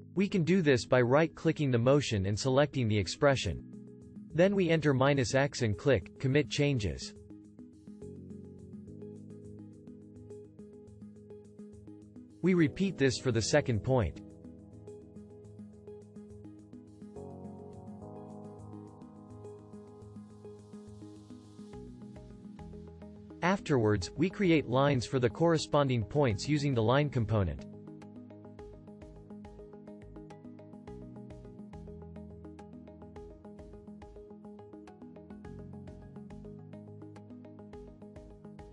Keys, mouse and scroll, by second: 14.5-16.7 alt+drag.